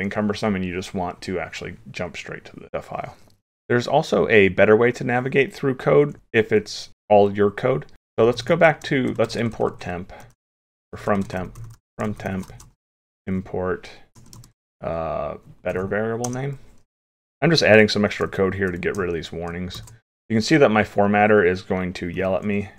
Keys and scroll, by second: 17.1 ctrl+s, 18.7 alt+shift+f, 19.8 ctrl+s.